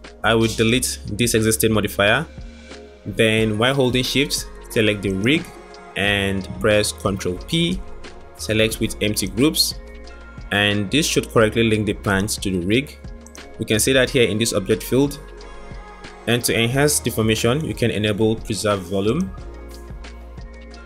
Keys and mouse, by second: 0.6 click, 5.3 shift+click, 7.8 ctrl+p, 11.7 click, 19.1-19.9 drag.